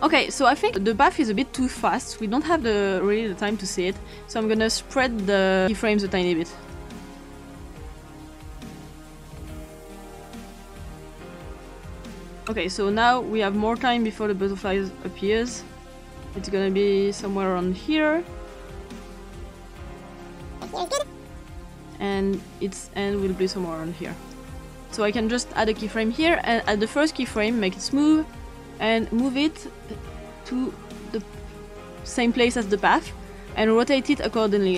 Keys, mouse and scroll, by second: 0.5 ctrl+scroll up 1, 2.2-4.0 drag, 4.4 click, 5.6 click, 6.7 click, 7.4 click, 7.8 click, 8.2 click, 8.5 click, 8.8 click, 9.0 click, 9.2 click, 9.4 click, 9.5 click, 9.9 click, 10.1 click, 10.2 click, 11.0 click, 11.3 click, 11.4 click, 11.6 click, 12.2 click, 12.4 click, 14.0 click, 15.5-18.7 drag, 19.0 click, 20.0 click, 22.0 click, 24.6 click, 26.6 click, 27.2 click, 27.4-28.3 drag, 29.0-31.2 drag, 34.0-34.7 scroll up 2.